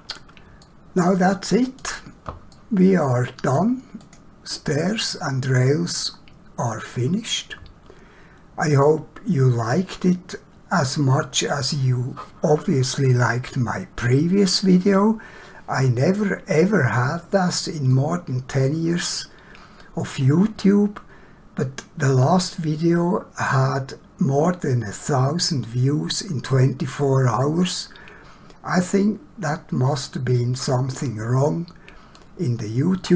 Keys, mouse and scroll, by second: 0.7 shift+middle click, 2.5 middle click, 4.0 click, 17.9 middle click.